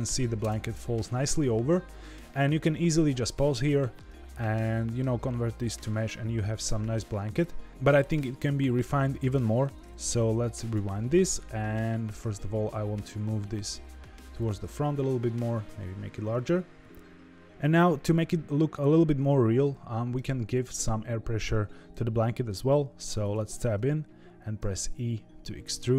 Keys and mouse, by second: 0.4 space, 0.7-3.9 middle drag, 4.7 shift+middle drag, 5.2-7.3 middle drag, 10.2-10.8 drag, 12.3 g, 15.6 s, 23.0 Tab, 24.5 e.